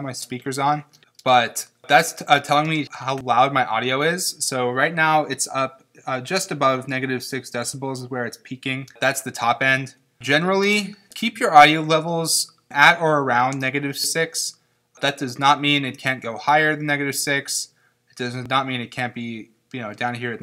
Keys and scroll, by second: 0.9 space, 8.9 space.